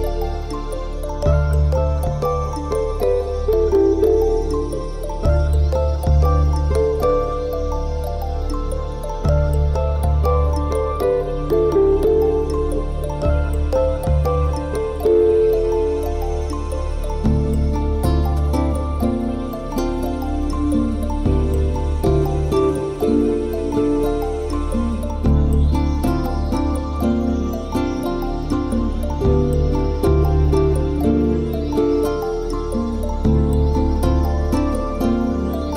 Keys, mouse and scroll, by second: 1.6 Delete, 2.4 middle click, 2.8 Tab, 3.1 middle click, 3.6 Tab, 4.0 click, 4.9 middle click, 5.6 click, 6.1 click, 6.4 alt+shift+click, 7.6 middle click, 9.5 Delete, 10.3 middle click, 14.6 click, 15.1 ctrl+l, 15.8-16.1 scroll down 4, 16.1 middle click, 17.4 scroll up 5, 18.1 g, 20.8 click, 20.9 middle click, 21.9 KP_1, 22.4 shift+middle click, 22.8 scroll up 2, 23.1 shift+middle click, 23.4-23.9 scroll down 4, 24.1 g, 25.8 click, 25.9-26.6 scroll up 12, 26.6 shift+middle click, 27.0 scroll up 1, 27.6 scroll down 5, 27.8-28.1 scroll down 9, 28.1 middle click, 29.4 shift+middle click, 29.6 scroll up 4, 31.1 click, 31.6 alt+shift+click, 31.9 click, 32.5 middle click, 33.4 alt+shift+click, 33.8 middle click, 34.5 middle click.